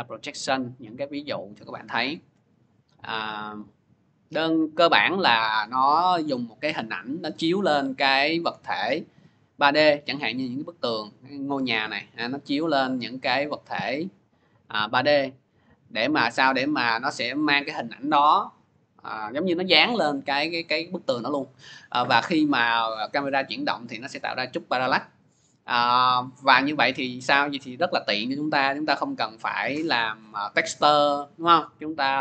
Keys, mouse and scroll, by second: 0.3 click, 0.5 click, 0.8-1.6 scroll down 5, 1.6 scroll down 5, 3.4 click, 3.7 scroll, 4.4 click, 8.9 click, 13.0 click, 15.5 click, 16.4 click, 26.7 click, 27.5-28.2 scroll, 28.9-30.5 scroll, 31.9 click.